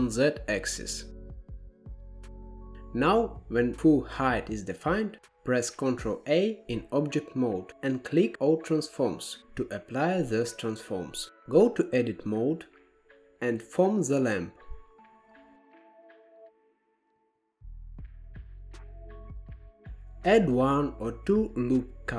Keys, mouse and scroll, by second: 1.3 e, 4.4 Tab, 5.8 alt+z, 7.7 ctrl+a, 11.0 Tab, 12.7 alt+z, 13.0 click, 13.7 s, 15.3 shift+middle click, 15.9 click, 16.6 shift+middle click, 17.9 s, 20.3 ctrl+r.